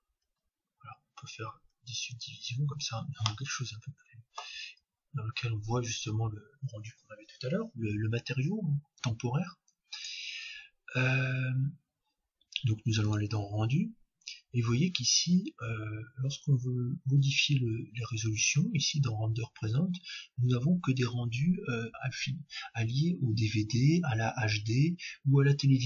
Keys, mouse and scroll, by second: 0.2 ctrl+3, 1.7 ctrl+4, 2.9-4.7 middle drag, 4.7-5.4 scroll up 1, 5.4-6.6 scroll down 1, 6.6-7.1 scroll down 1, 9.9-11.8 drag, 13.1-14.9 drag, 18.9-20.7 drag.